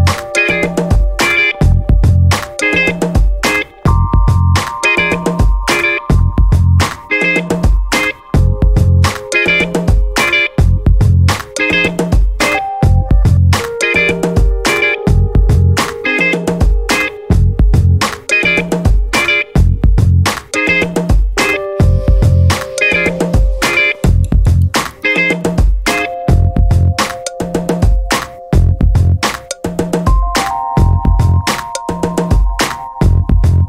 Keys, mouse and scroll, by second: 3.6 click, 4.6-4.9 scroll down 1, 5.6-11.6 drag, 11.9-12.7 scroll up 2, 14.1-15.5 drag, 16.8-17.1 scroll down 1, 18.0 scroll up 1, 19.2-21.8 drag, 22.0-24.6 drag, 25.0-27.7 drag, 28.6-30.7 drag, 31.9-32.2 scroll down 2, 32.6 1.